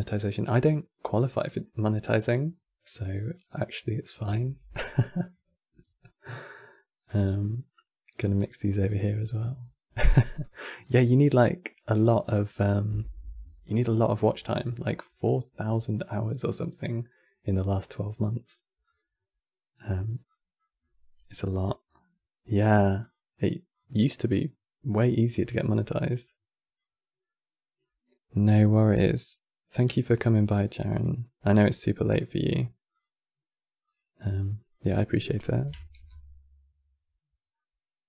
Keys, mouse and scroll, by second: 2.1-2.6 scroll up 3, 2.9 click, 4.2 shift+d, 5.7 click, 9.3 click, 10.1 click, 16.1 click, 30.6 click, 37.3-38.0 middle drag.